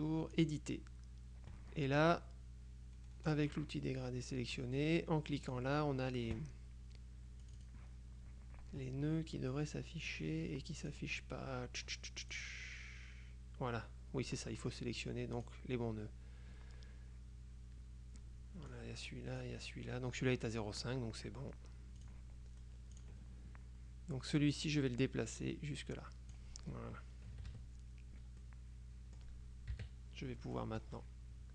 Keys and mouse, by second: 0.4 click, 3.4 click, 5.6 click, 7.5 click, 10.2-11.5 drag, 12.5 click, 15.5 click, 18.8-20.0 drag, 22.1 click, 23.0 click, 24.7-27.0 drag, 27.4 KP_Subtract, 28.5-29.8 drag, 29.8 KP_Subtract, 30.7 click, 31.0 middle click.